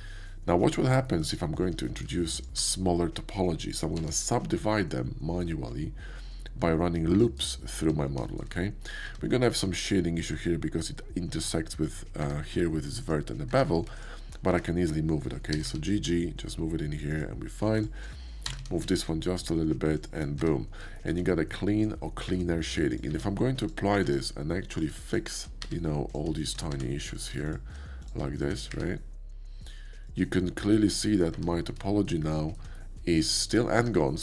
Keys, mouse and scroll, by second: 0.2-0.6 scroll up 1, 0.6 shift+middle click, 1.0 scroll up 1, 1.2 shift+middle click, 2.3 shift+middle click, 2.6 Tab, 3.8 ctrl+r, 4.7-5.9 scroll up 1, 7.4 click, 7.8 Tab, 8.2-9.8 shift+middle drag, 8.9 Tab, 9.8 alt+click, 12.2 Tab, 14.0 alt+Tab, 14.5 Tab, 15.5 g, 17.1 click, 18.3 g, 18.8 g, 19.9 shift+click, 20.4 Tab, 21.0-22.9 shift+middle drag, 22.9 click, 23.0 middle click, 23.1 q, 23.6 q, 23.6 ctrl+click, 23.9-26.1 middle drag, 24.0 Tab, 25.6 1, 26.1 click, 26.4 shift+click, 26.7 1, 27.4 shift+click, 28.0 shift+click, 28.4 shift+click, 28.7 1, 29.9 click, 30.3 shift+middle click, 31.3 Tab, 31.3-31.7 middle drag, 31.8-32.7 shift+middle drag, 32.7 shift+scroll up 1, 32.9-33.3 middle drag, 33.6 middle click, 33.7 Tab.